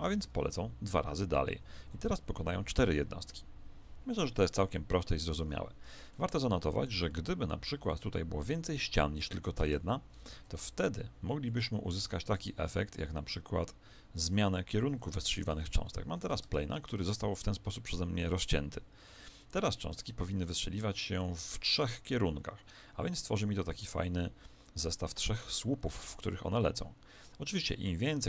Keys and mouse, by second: 0.3-5.1 middle drag, 5.1 Escape, 6.1-9.7 middle drag, 9.6 Tab, 10.3 ctrl+r, 13.1 click, 14.9 KP_1, 15.8-17.9 middle drag, 16.4 Tab, 19.1-21.9 middle drag, 20.4 alt+a, 22.0-28.2 middle drag.